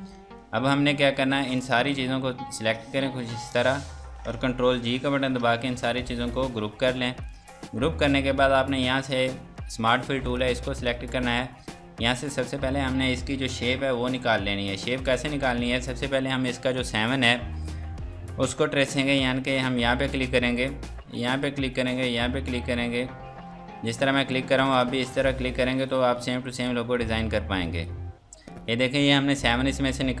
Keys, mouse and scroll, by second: 0.7-1.6 scroll down 1, 1.6 click, 4.9 ctrl+g, 7.2 click, 10.7 click, 20.0 click, 29.5-30.2 scroll down 1.